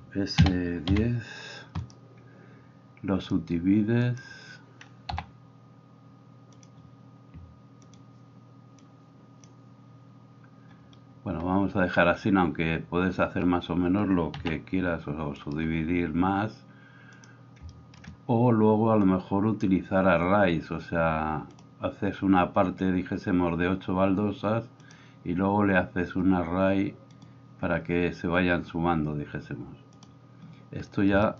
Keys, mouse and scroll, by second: 2.0-3.3 middle drag, 3.3-21.7 drag, 5.2 w, 14.3 s, 21.7-24.9 middle drag, 24.9-31.3 drag.